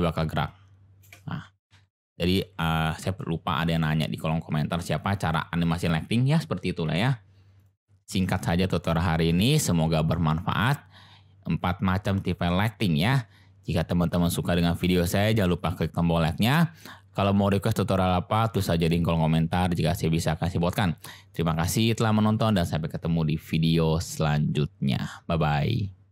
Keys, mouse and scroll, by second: 1.4 ctrl+space, 1.7 ctrl+z, 2.3 ctrl+z, 3.0 ctrl+z, 4.8 click, 5.6 click, 6.9 Delete, 21.4-22.5 middle drag.